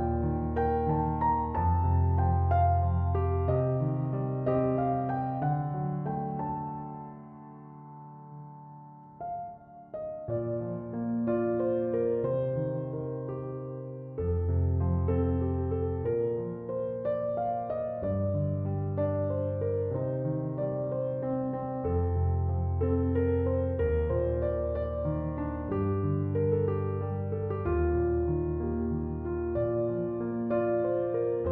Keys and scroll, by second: 25.0 space.